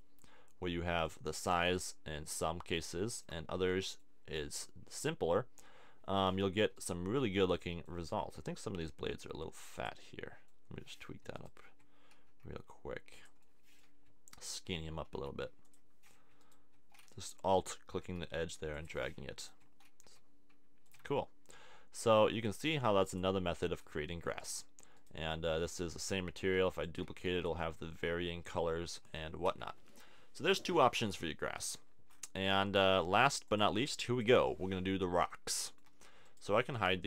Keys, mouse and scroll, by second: 4.6 middle click, 5.2 Tab, 6.7 click, 7.9 click, 8.5 g, 12.2 g, 15.1 g, 15.7-17.1 drag, 17.1 middle click, 18.0 g, 20.0 g, 20.9 a, 21.0 Tab, 26.6 shift+d, 27.1 shift+d, 29.1 z, 29.5 z, 33.6-35.2 drag, 35.2-36.2 middle drag, 36.2-37.0 drag.